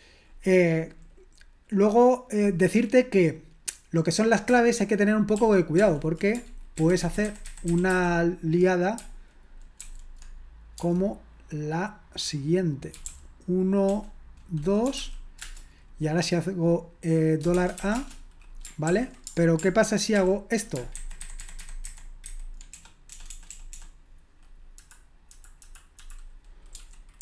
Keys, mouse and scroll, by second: 5.4 ctrl+p, 5.8 ctrl+p, 6.8 alt+b, 7.0 alt+b, 7.2 alt+b, 7.5 alt+b, 7.8 alt+b, 9.8 alt+f, 10.8 space, 15.2-15.9 typing, 17.7-18.5 typing, 18.9 ctrl+p, 20.2 ctrl+p, 21.0 alt+b, 21.2 alt+b, 21.4 alt+b, 21.6 alt+b, 22.8-23.7 typing, 24.8 Delete, 25.3 Delete, 25.6 Delete, 26.0 Delete, 26.5-27.2 typing.